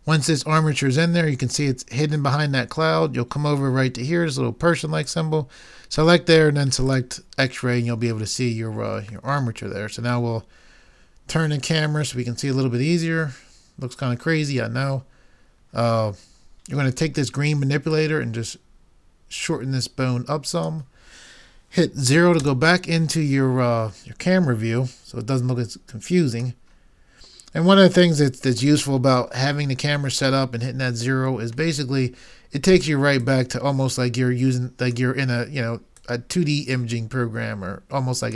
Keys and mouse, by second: 5.0-8.8 drag, 9.4 middle click, 14.4-17.4 middle drag, 18.1 click, 22.4 KP_0, 33.2 click, 36.0 click.